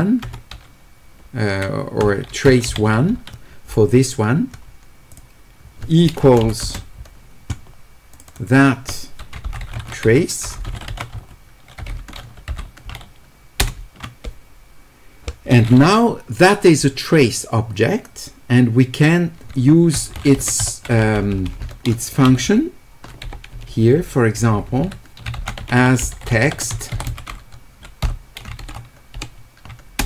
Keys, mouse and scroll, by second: 6.2 space, 6.6 space, 8.2 click, 8.3 click, 9.7 q, 10.7 w, 11.2 e, 20.1 w, 20.6 e, 25.4-26.3 typing.